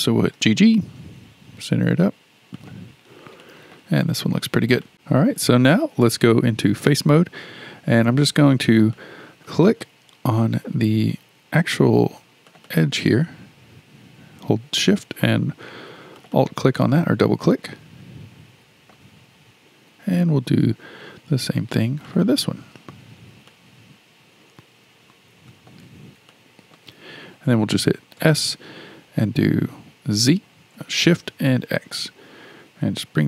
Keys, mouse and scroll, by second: 0.3 g, 3.4-4.9 shift+middle drag, 6.8 3, 6.9 3, 8.5-8.9 scroll up 3, 8.9-12.0 shift+middle drag, 12.5 click, 12.7 click, 16.2 shift+click, 16.4 shift+click, 17.4-20.6 shift+middle drag, 22.0 shift+click, 22.2 shift+click, 23.5-28.2 shift+middle drag, 28.2 s.